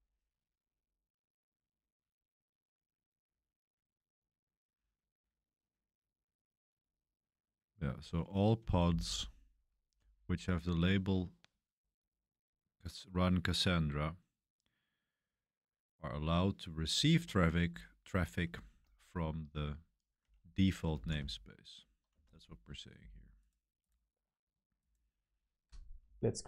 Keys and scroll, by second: 9.0-9.9 typing, 19.9-22.0 typing, 24.3 typing, 26.0 shift+;, 26.4 BackSpace.